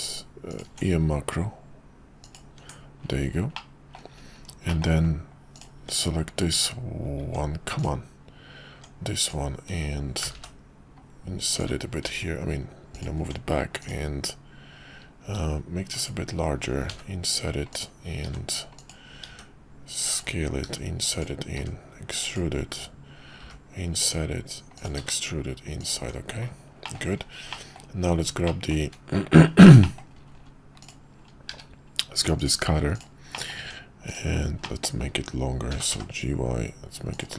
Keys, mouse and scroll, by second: 2.6 Tab, 3.5-4.0 middle drag, 4.7 middle click, 5.8 Tab, 10.2 g, 12.0 ctrl+b, 13.2 Tab, 15.2 s, 16.9 i, 18.2 e, 19.3 s, 20.6 i, 21.6 e, 23.4 i, 25.0 e, 25.9 Tab, 26.8 middle click, 27.5 middle click, 28.5 middle drag, 29.8 middle drag, 31.5 q, 33.3 middle click, 33.6 Tab, 34.0 click, 34.7 middle click, 35.7 g.